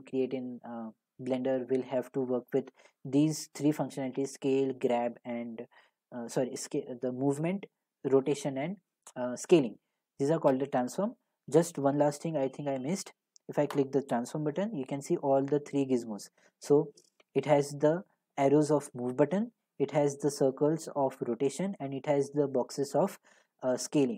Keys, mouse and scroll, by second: 13.9 click.